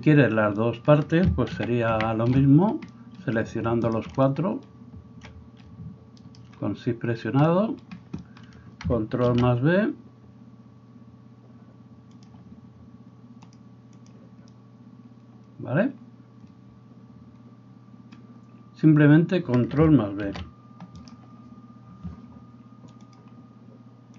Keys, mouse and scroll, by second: 1.6 ctrl+z, 2.0 ctrl+z, 6.3 shift+middle click, 6.3 shift+right click, 9.3 ctrl+b, 12.3-13.6 middle drag, 13.6-23.2 drag, 20.3 ctrl+b.